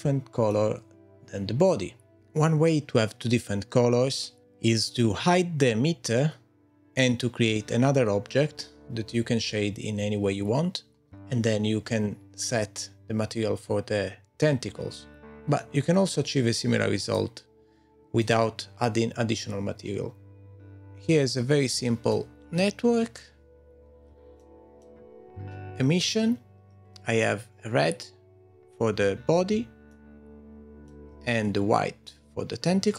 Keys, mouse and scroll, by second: 20.6 middle click, 20.6-21.0 scroll down 5, 21.2-22.1 scroll up 8, 22.1 middle click, 23.4-23.7 scroll up 2, 24.4 shift+middle click, 29.9 shift+middle click.